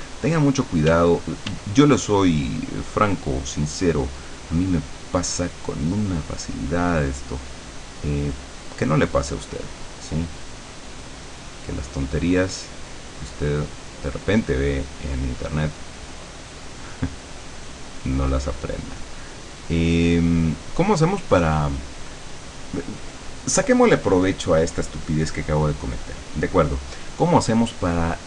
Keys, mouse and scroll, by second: 0.9 d, 2.4-6.7 drag, 7.3-21.3 drag.